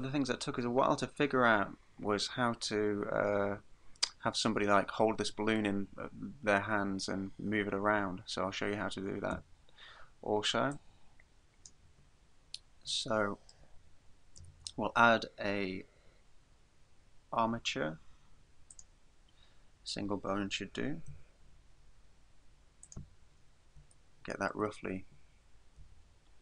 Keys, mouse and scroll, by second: 9.4 Escape, 10.7 click, 13.1 shift+middle click, 14.5 shift+a, 21.1 g, 23.0 click, 23.4-24.1 scroll up 3, 24.1 shift+middle click, 24.8-25.6 scroll up 2, 25.8 g.